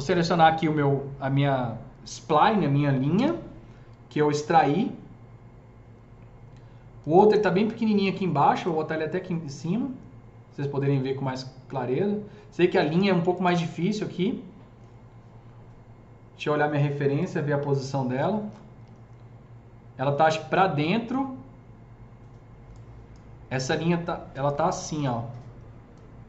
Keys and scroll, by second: 2.8-3.7 typing, 24.8 e.